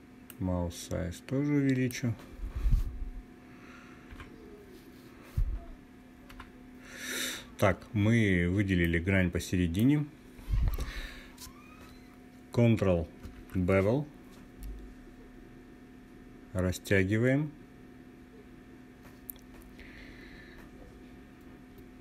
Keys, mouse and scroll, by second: 3.6 t, 5.8 n, 8.3 click, 12.9 ctrl+b, 21.7 click.